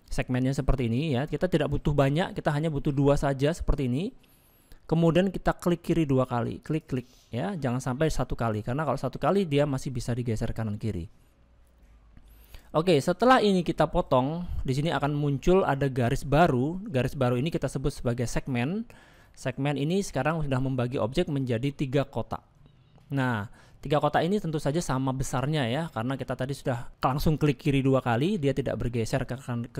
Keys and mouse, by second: 19.2 middle click, 21.2 middle click, 23.4 middle click, 25.5 middle click.